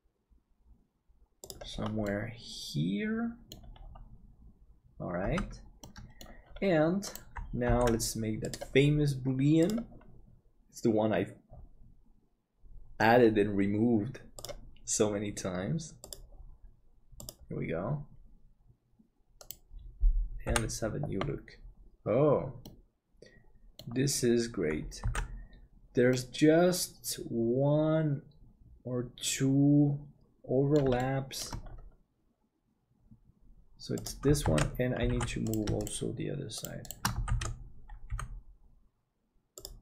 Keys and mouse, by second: 2.2-3.5 middle drag, 5.3 Tab, 5.8 middle click, 7.9 ctrl+s, 20.5 h, 22.7-23.8 middle drag, 25.2 ctrl+s, 26.1-30.7 middle drag, 31.0 shift+middle click, 31.9 g, 34.4 alt+z, 35.1 alt+a, 37.3 alt+z, 38.1 g.